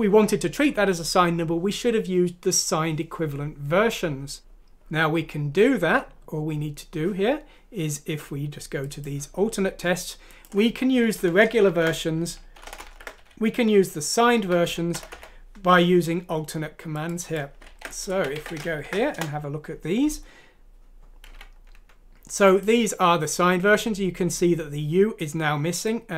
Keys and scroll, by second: 11.1 Left, 11.6-14.4 typing, 13.9 Down, 14.4 Left, 14.4 Down, 14.4 Right, 14.6 Left, 17.6 ctrl+c, 18.1 ctrl+f, 18.4-18.8 typing, 19.1 Return, 21.3 F1, 21.7 Escape.